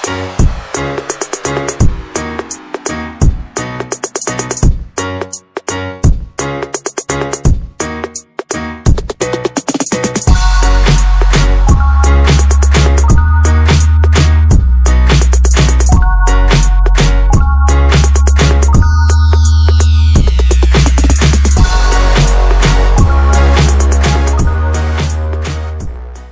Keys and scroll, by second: 0.0-2.1 typing, 3.3 Return, 4.1-5.0 typing, 6.4 Return, 8.0 Escape, 8.4 Escape, 8.6 Escape, 14.5 Escape, 14.5 Escape, 15.7 Escape, 15.8 Escape, 16.6 z, 18.7-19.2 Escape, 20.4 Escape, 20.5 Escape, 20.8 ctrl+s, 21.3 ctrl+s.